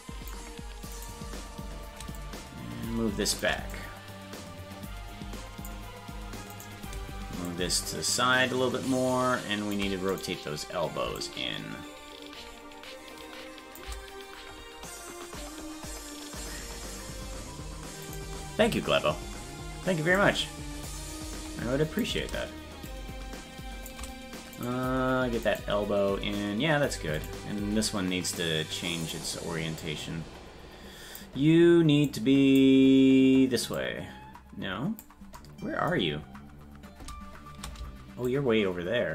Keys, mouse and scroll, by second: 1.1 right click, 2.2-3.4 shift+drag, 3.7-5.7 drag, 6.6 right click, 7.5-9.7 shift+drag, 10.2 right click, 11.2-13.8 shift+drag, 18.1 right click, 20.2-22.1 drag, 22.9-23.9 shift+drag, 24.7 right click, 25.6-27.9 right drag, 29.1 right click, 29.8-31.2 drag, 32.1 click, 33.8-35.0 drag, 36.0 scroll down 1, 38.3-39.1 shift+drag, 38.3-39.1 scroll down 7.